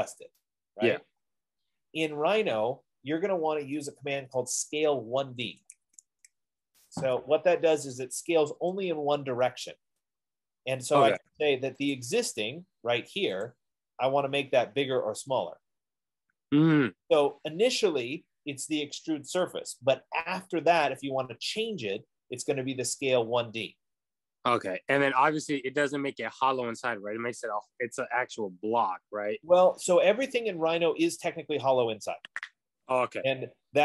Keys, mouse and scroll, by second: 5.8-7.0 typing, 8.8 Return, 12.3 click, 13.7 click, 18.6 click, 25.7-30.8 drag.